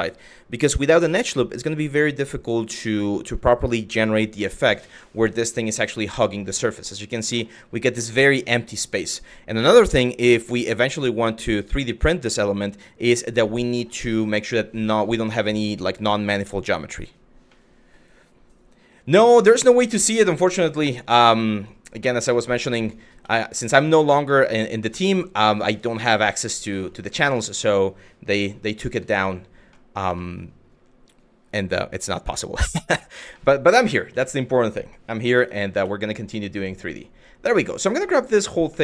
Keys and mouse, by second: 5.1 click, 5.7 middle click, 6.3 shift+middle click, 7.0 shift+middle click, 13.1 middle click, 13.7 middle click, 15.1 click, 17.2 middle click, 19.3 shift+middle click, 20.0 Tab, 21.2 click, 21.6 middle click, 22.0 middle click, 22.5 click, 22.8 Tab, 24.0 middle click, 25.8 click, 26.4 shift+middle click, 27.1 shift+middle click, 29.3 middle drag, 29.8 shift+middle drag, 33.0 middle drag, 33.8 shift+middle drag, 35.0 Tab, 35.4 Tab, 36.5 click, 37.3 middle click, 38.4 shift+middle click.